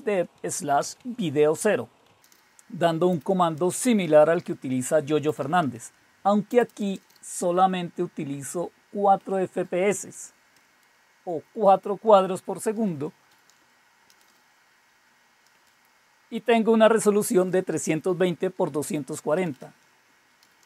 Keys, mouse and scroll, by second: 0.0-7.2 typing, 9.2-11.0 typing, 12.0-14.6 typing, 15.6 typing, 17.2-20.6 typing.